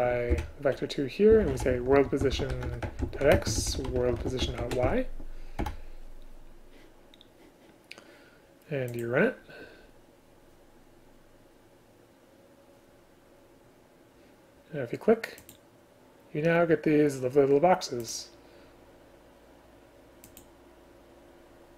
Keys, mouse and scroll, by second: 0.4 Delete, 2.7 Return, 3.4 space, 4.5 Return, 5.7 Return.